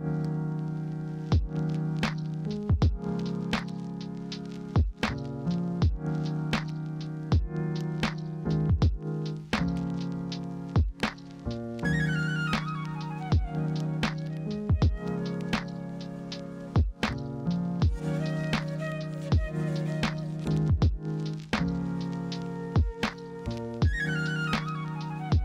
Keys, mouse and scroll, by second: 5.2 ctrl+a, 18.1 ctrl+g.